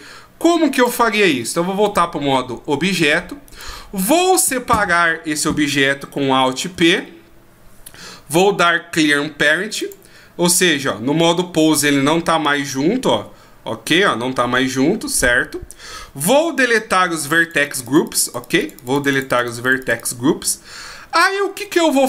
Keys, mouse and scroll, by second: 1.1 click, 2.0 click, 3.5 right click, 6.7 alt+p, 11.7 right click, 13.1 r, 15.1 right click, 17.2 click, 17.4 click, 17.6 click, 17.9 click, 18.0 click, 18.2-19.8 click, 18.4 click, 18.6 click, 18.9 click, 19.1 click, 19.5 click, 19.6 click, 20.0 click.